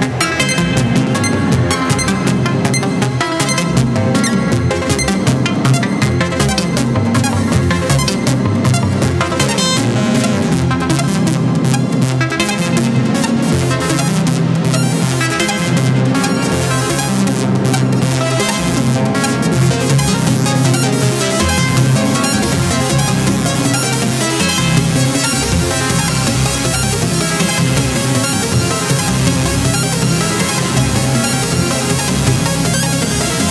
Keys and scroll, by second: 4.8 Down, 4.9 Left, 5.1 Down.